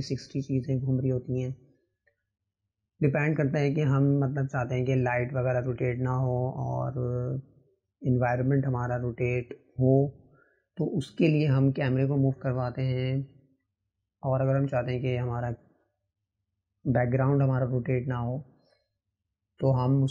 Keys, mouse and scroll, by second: 0.2 click, 3.3-5.4 drag, 6.1 click, 6.9-12.9 drag, 13.8 click, 17.1 click.